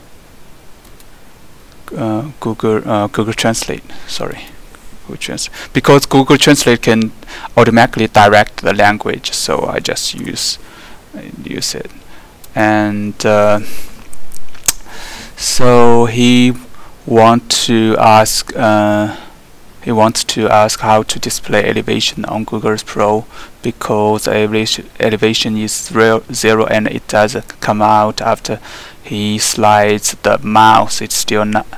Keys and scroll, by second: 10.2 ctrl+v.